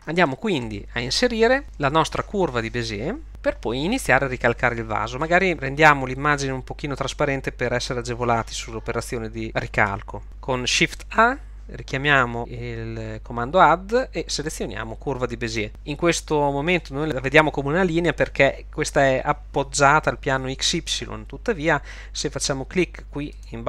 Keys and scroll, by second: 11.1 shift+a.